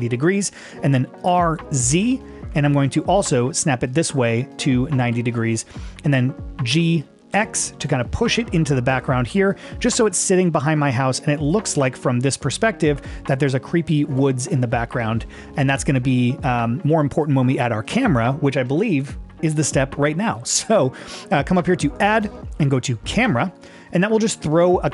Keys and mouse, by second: 1.3 r, 1.9 z, 6.7 g, 7.3 x, 11.7-12.7 middle drag, 13.9 shift+middle click, 14.3 middle click, 15.1 middle click, 21.9-23.7 drag.